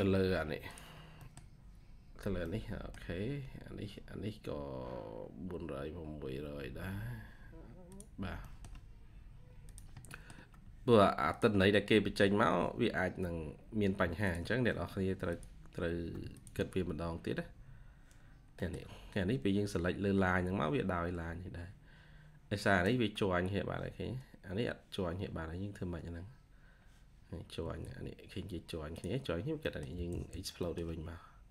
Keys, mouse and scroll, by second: 0.0-0.1 typing, 0.8 scroll down 1, 1.1 middle click, 2.4 middle click, 2.6 scroll down 1, 3.2 scroll up 1, 5.4-6.5 scroll down 1, 6.5-7.5 scroll up 1, 8.3 middle click, 10.0 middle click, 16.2 shift+click, 18.3 scroll down 1, 18.5 middle click, 19.4 scroll up 1, 21.6-22.6 scroll down 1, 27.2 scroll down 1, 27.5 Escape, 27.7 Escape, 27.8-28.8 scroll up 1, 29.6 middle click, 29.8 x, 30.5 middle click, 30.7-31.3 scroll down 1.